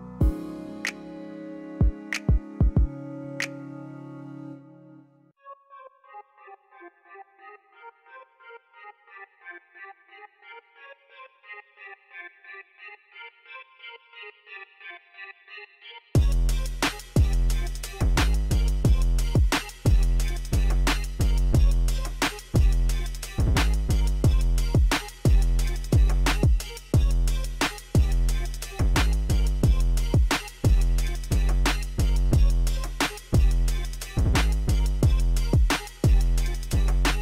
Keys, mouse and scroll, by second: 0.2 click, 0.8 click, 2.3-2.6 scroll up 2, 2.7-3.0 middle drag, 3.2 scroll down 1, 3.5 middle click, 6.2 click, 6.5-7.5 scroll up 6, 8.0 click, 8.7 click, 9.5 click, 10.2 click, 10.7 KP_0, 11.0 KP_5, 11.2 Return, 13.0-14.2 scroll down 4, 16.0 click, 16.6 KP_0, 16.9 KP_2, 17.0 Return, 17.7 click, 18.2 KP_0, 18.5 KP_2, 18.6 Return, 19.6 middle click, 20.3 Escape, 22.8 middle drag, 23.7 click, 24.0-24.4 scroll down 3, 25.1 click, 25.7 click, 27.0-29.9 drag, 31.1 click, 32.0 KP_1, 32.4 Return, 33.2 click, 33.8 KP_3, 34.0 KP_0, 34.2 Return, 34.8 click, 35.4 KP_2, 35.6 KP_5, 35.7 Return, 36.3 click.